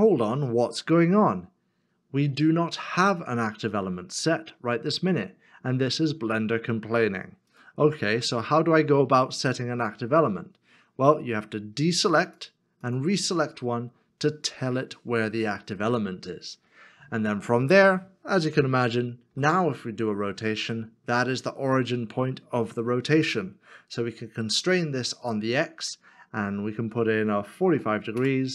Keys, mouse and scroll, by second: 8.1 r, 12.3 shift+click, 19.3 r, 25.1 x, 27.6 x, 27.7 5, 28.2 Return.